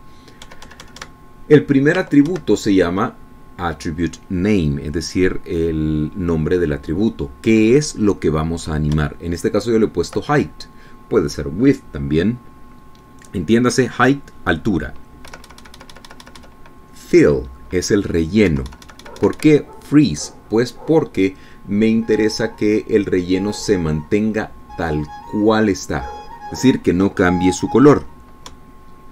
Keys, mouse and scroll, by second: 2.0 Right, 3.7 Left, 3.9 Right, 10.5 Right, 16.9 Right, 20.1 Right.